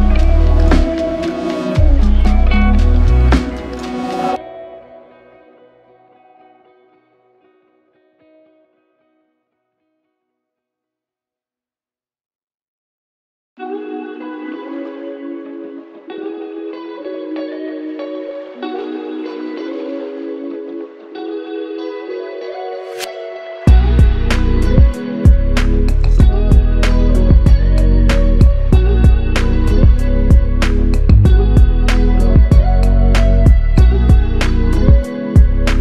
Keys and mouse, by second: 0.8 double click, 11.0 alt+click, 13.8 ctrl+click, 15.8 alt+click, 17.7 alt+click, 23.4 alt+click, 24.4 alt+right click, 28.3 double click, 30.7 double click, 32.2 alt+click.